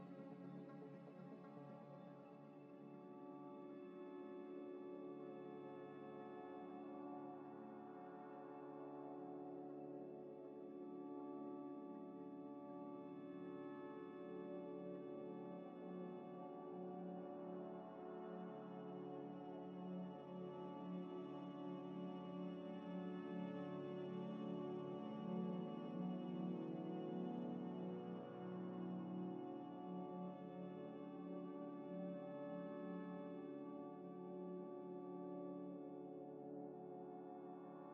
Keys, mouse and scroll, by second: 3.7-4.2 scroll up 1, 4.2 middle click, 5.3 scroll up 1, 9.1 middle click, 12.1 double click, 13.3 middle click, 14.4 scroll down 1, 16.1 middle click, 17.0 alt+Tab, 18.8 alt+Tab, 19.0 alt+Tab, 19.8 alt+Tab, 20.2 alt+Tab, 20.3 alt+Tab, 20.4 alt+Tab, 23.6 middle click, 30.3 z, 30.8 ctrl+shift+click, 34.4-36.4 typing, 34.9 F3.